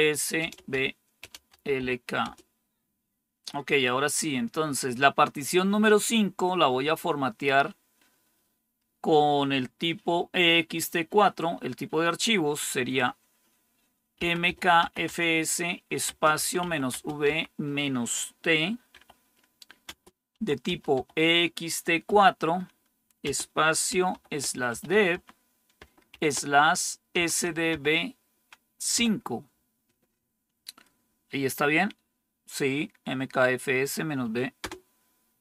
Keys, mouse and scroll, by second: 0.0-2.2 typing, 13.8-17.2 typing, 18.8-22.0 typing, 23.2-28.9 typing, 34.5 Return.